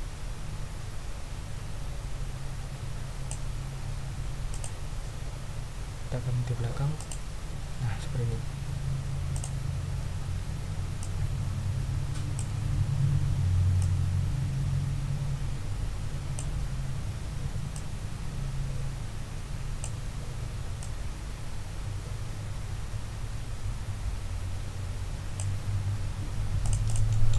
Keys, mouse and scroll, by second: 4.5 click, 7.0 click, 9.3 click, 11.0-12.5 drag, 13.8-16.5 ctrl+drag, 17.7-20.0 ctrl+drag, 20.8-25.5 ctrl+drag, 25.7 ctrl+scroll down 2, 26.6 click.